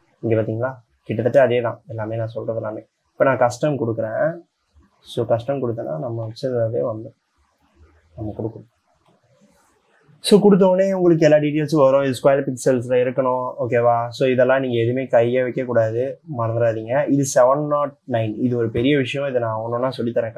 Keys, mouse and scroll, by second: 2.8-3.1 scroll up 4, 3.9 scroll up 1, 4.4 scroll up 1, 5.1 scroll up 5.